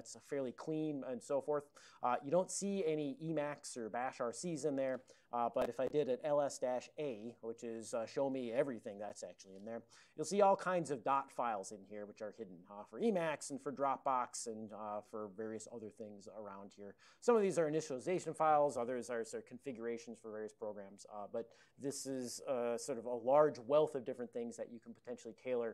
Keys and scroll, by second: 5.6-7.1 typing.